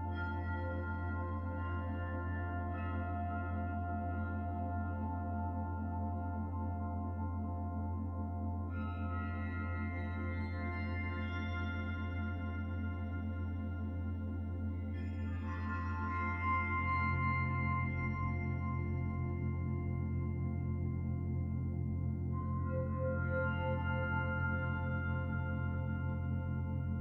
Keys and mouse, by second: 1.6 ctrl+r, 7.5 s, 20.2 shift+middle click, 23.6 click.